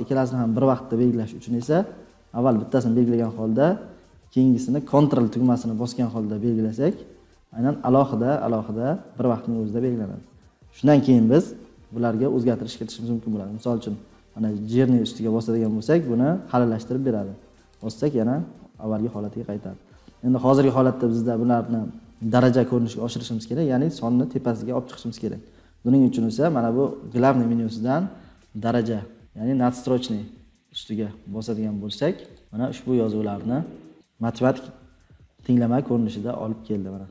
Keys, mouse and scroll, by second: 3.2 click, 6.8 ctrl+click.